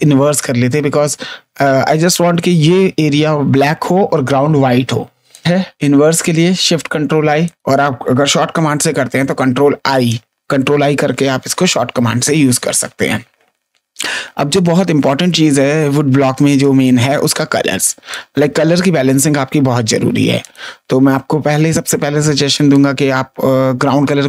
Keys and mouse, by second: 5.3 click, 7.4 click, 8.9 ctrl+i, 16.2 space, 16.5 click, 17.3 ctrl+click, 18.0 click, 19.1 space, 20.3 click, 22.7 click.